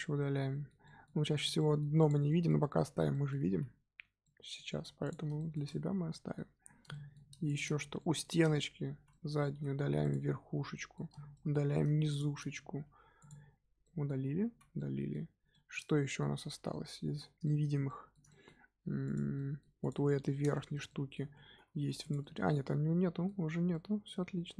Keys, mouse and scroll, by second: 1.3 click, 1.5 middle click, 1.9 click, 2.2 middle click, 2.7 scroll down 3, 2.8 Tab, 3.1-3.4 middle drag, 3.4 z, 4.2-5.0 middle drag, 5.0 click, 5.3-6.6 shift+middle drag, 6.6 scroll down 1, 6.9-7.4 shift+middle drag, 7.4 click, 7.9 middle drag, 8.2 Tab, 8.9 z, 9.1 middle drag, 9.3 scroll up 2, 9.5 3, 10.0 click, 10.6 scroll down 2, 10.7 middle click, 11.6-12.0 scroll up 2, 12.0 shift+click, 12.5 x, 13.5 scroll down 2, 13.8 middle click, 14.2 Tab, 14.4 z, 14.7-16.3 middle drag, 16.3-16.7 scroll up 2, 16.7-19.0 middle drag, 19.0 click, 19.3-19.8 middle drag, 19.8 click, 20.2 Tab, 20.5-21.2 shift+middle drag, 21.2 z, 22.0 click, 22.2-24.3 middle drag, 24.3 Tab.